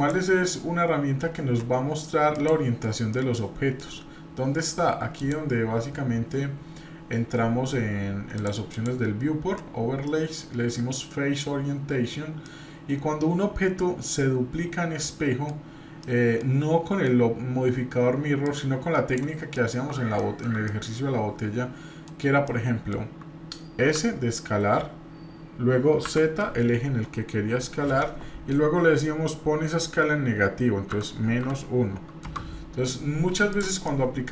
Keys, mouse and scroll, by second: 0.0-2.8 drag, 3.1-3.8 middle drag, 5.2-8.4 drag, 8.7-11.7 drag, 12.4-15.5 middle drag, 15.6-16.0 scroll down 1, 16.0-16.4 middle drag, 18.4 click, 19.5 middle click, 20.6-22.1 middle drag, 22.5 middle click, 23.8 s, 25.9 click, 33.5 drag, 33.8-34.3 middle drag.